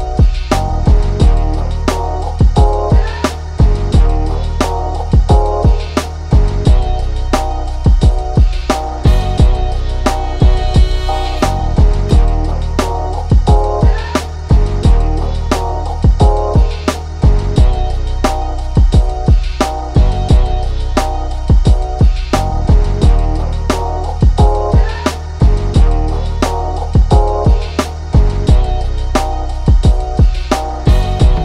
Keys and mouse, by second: 1.3 click, 2.1-8.8 drag, 11.4 right click, 11.9-15.9 drag, 15.9 ctrl+d, 17.2-21.4 drag, 22.4 right click, 22.8 click, 24.3 click, 24.8 click, 26.2 click, 27.2 click, 29.0-30.7 drag, 31.1 click.